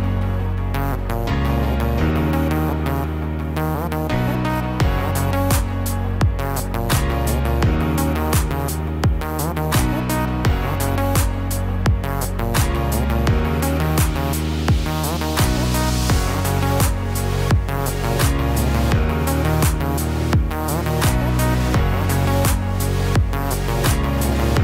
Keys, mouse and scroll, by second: 5.4 scroll up 2, 5.9 scroll up 6, 6.5 middle click, 8.9 ctrl+r, 12.4 a, 13.6 s, 16.2 g, 21.7 click, 23.4 g.